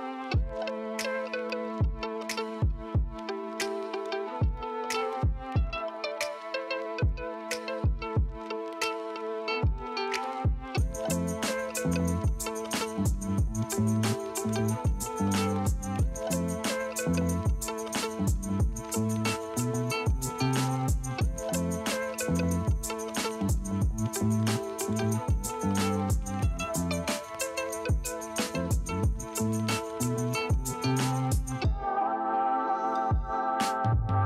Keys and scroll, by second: 0.6 ctrl+alt+z, 2.4 space, 3.0 ctrl+space, 4.7 ], 5.4 [, 10.5 ctrl+alt+z, 13.7 space, 14.4 space, 15.5 space, 16.0 ctrl+s, 17.7 F10, 20.6 space, 23.9 Escape.